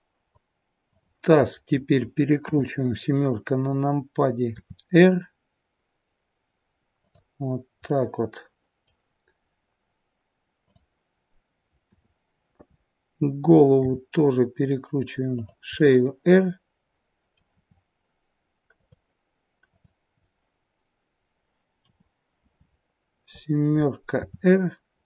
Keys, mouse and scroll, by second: 0.8 click, 2.4 KP_7, 4.5 r, 7.9 middle click, 10.6 click, 11.8 KP_7, 13.7 r, 15.7 middle click, 17.4 r, 19.5 click, 21.7 KP_7, 24.0 r.